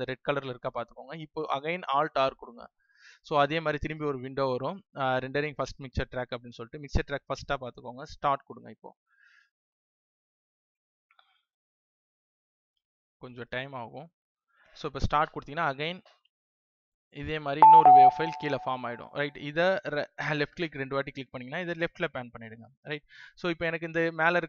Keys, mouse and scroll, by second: 2.5 alt+r, 8.1 click.